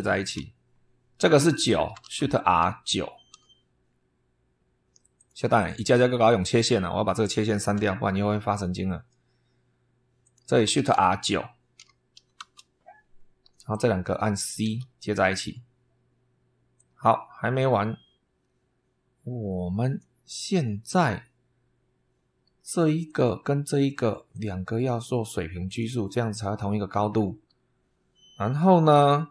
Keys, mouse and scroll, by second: 1.4 click, 1.9 shift+r, 3.2 9, 5.0 click, 5.5 click, 6.3 click, 7.6 Delete, 10.1 click, 10.6 shift+r, 11.7 9, 12.3 Return, 13.6 click, 14.5 c, 16.6-20.1 drag, 20.1-20.9 scroll up 4, 22.9 click, 24.2 click, 25.5 click, 26.7-27.1 scroll down 2.